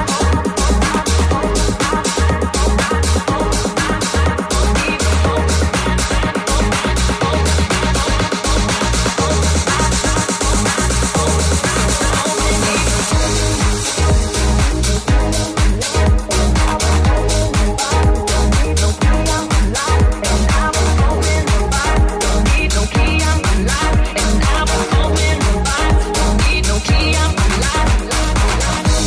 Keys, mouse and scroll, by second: 0.2 middle click, 0.3 middle click, 0.6-1.6 middle drag, 1.7-7.1 middle drag, 1.8 Tab, 7.4 middle click, 7.6 middle click, 9.2-12.5 ctrl+middle drag, 12.5 click, 12.5-21.2 middle drag, 12.7 Tab, 13.8 ctrl+r, 21.4-24.9 middle drag, 24.2 ctrl+z, 27.2 middle click, 27.7-29.0 middle drag.